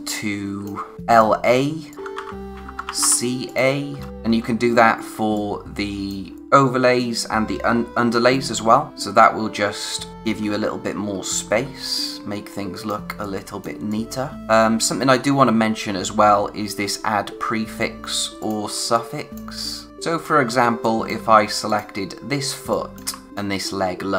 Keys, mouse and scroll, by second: 0.9 a, 1.1 click, 1.9 ctrl+c, 2.1 ctrl+a, 2.4-5.5 typing, 3.4 click, 3.9 scroll down 1, 4.1 click, 4.4-5.0 scroll up 1, 5.3 click, 7.9-8.9 scroll down 1, 10.0 space, 11.3-11.7 scroll down 1, 11.7 space, 11.9 click, 12.2 space, 18.4 click, 18.8 space, 18.9 click, 19.3 space, 19.9 click, 20.1 space, 20.8 click, 21.1 space, 21.6 click, 22.1-22.5 scroll up 1, 22.5 space, 22.7 click, 23.3 ctrl+click.